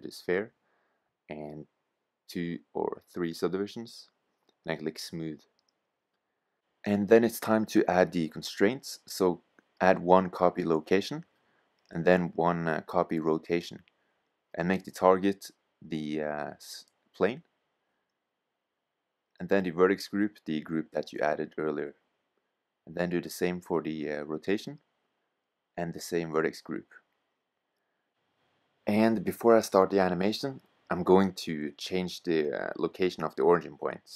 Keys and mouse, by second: 0.0-2.4 drag, 2.7-4.5 drag, 5.0-10.0 drag, 10.9-12.6 drag, 13.9-15.7 drag, 19.3-23.4 drag, 25.0-26.7 drag, 29.4 Tab, 29.8-31.0 middle drag, 32.9-34.0 middle drag, 34.0 g.